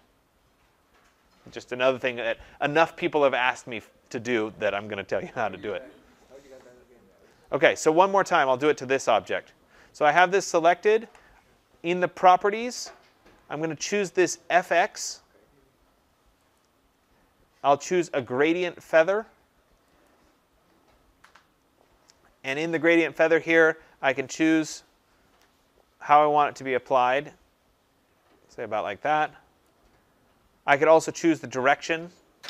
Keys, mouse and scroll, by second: 7.3 click, 8.6 click, 16.5 click, 20.0 click, 29.5 click.